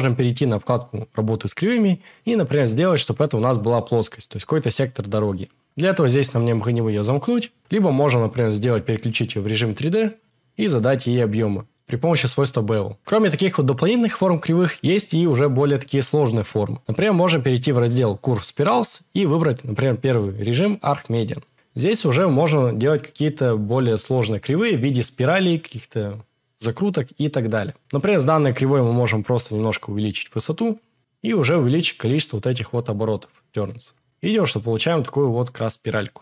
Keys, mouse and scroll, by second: 6.8 click, 29.6-31.0 drag, 32.1 click, 35.5 click.